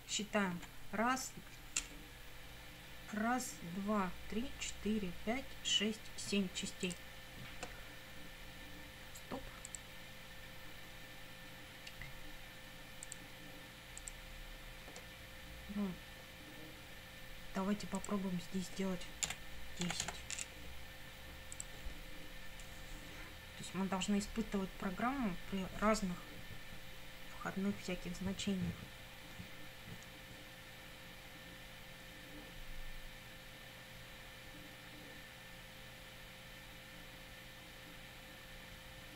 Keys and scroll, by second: 0.3 Up, 19.3-20.5 typing.